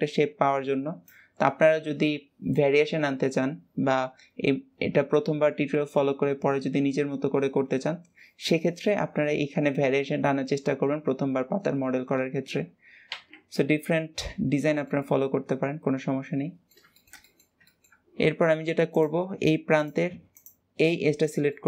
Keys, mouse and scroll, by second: 13.4-17.9 middle drag, 17.9-18.8 scroll up 1, 18.8 drag, 19.7 click, 20.2 click, 20.8-21.1 scroll up 1, 21.1-21.6 middle drag.